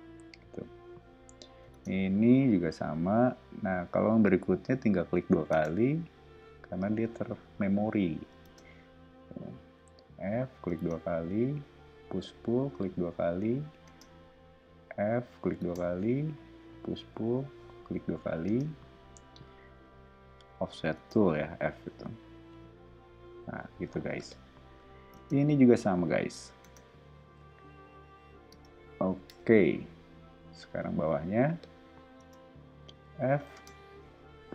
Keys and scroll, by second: 0.7 o, 1.7 space, 2.4 f, 5.5 space, 6.8 p, 8.4 space, 9.7 f, 10.7 space, 12.0 p, 13.8 space, 14.6 f, 15.6 space, 17.1 p, 18.4 space, 19.7 f, 20.9 space, 22.2 p, 23.6 o, 25.1 space, 25.8 f, 26.6 space, 27.4 p, 28.5 space, 29.3 BackSpace, 30.1 o, 32.1 space, 32.8 f, 33.5 space, 34.2 p.